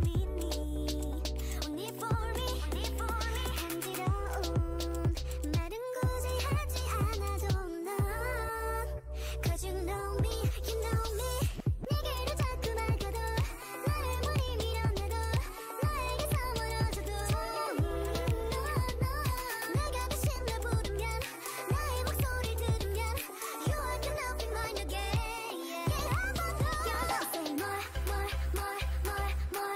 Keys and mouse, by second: 1.3 g, 5.0 shift+Tab, 5.4 g, 7.3 g, 10.0 g, 11.5-12.9 right drag, 13.1 g, 14.2-16.6 drag, 14.3 g, 18.1 Tab, 18.5 click, 19.8 Tab, 21.0 s, 22.2 Tab.